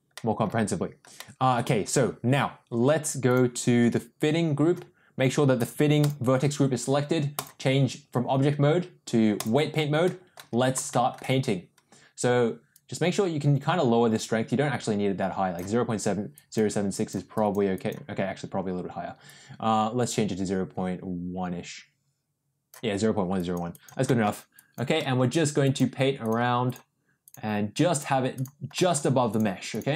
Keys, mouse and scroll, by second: 0.1 middle drag, 1.2 middle drag, 3.3 click, 5.6 click, 7.3-9.4 drag, 10.0 middle click, 10.9 shift+middle click, 12.7-15.5 drag, 16.3 click, 16.9 click, 17.3 click, 17.7 click, 19.3-22.7 drag, 23.3 click, 23.7 click, 24.0 middle click, 24.5 click, 24.9 middle click, 25.6 click, 26.2 click, 26.6 click, 27.2 click, 27.9 click, 28.3 click, 28.7 middle click, 29.2 click, 29.7 click.